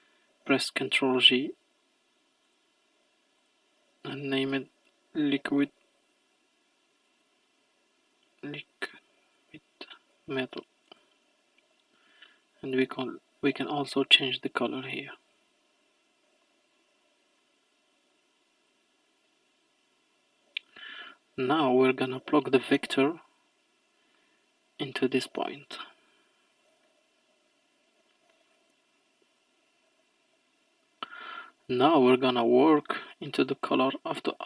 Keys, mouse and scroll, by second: 0.7 ctrl+j, 2.5-6.5 drag, 7.2 BackSpace, 7.4 BackSpace, 12.5-13.5 drag, 15.4-16.1 scroll down 2, 16.1-16.5 scroll down 1, 16.5-18.1 middle drag, 18.1 click, 18.9-20.1 scroll up 9, 20.1-22.6 middle drag, 22.6 click, 26.0-29.7 scroll down 13, 29.7 scroll down 1, 29.9-30.9 scroll up 3, 30.9 scroll up 1, 31.1 middle click, 31.7-32.6 scroll up 4, 32.6-33.2 middle drag, 33.2-34.0 scroll up 1, 34.0 middle click.